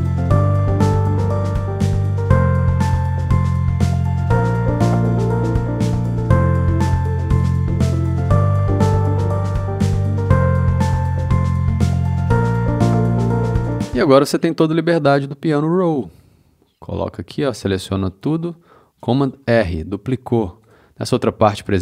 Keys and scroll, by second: 2.2 c, 19.4 super+r.